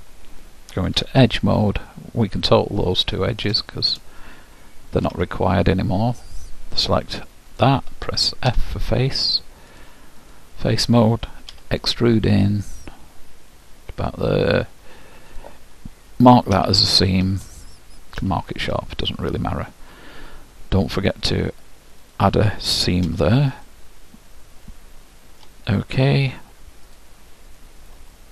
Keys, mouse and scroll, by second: 0.9 ctrl+Tab, 3.0-5.5 drag, 5.1 ctrl+x, 7.5-9.5 drag, 8.7 f, 9.8-12.1 drag, 11.5 e, 18.2 ctrl+', 21.2-23.8 drag, 23.8-25.5 middle drag, 26.9-28.3 drag, 28.1 middle click.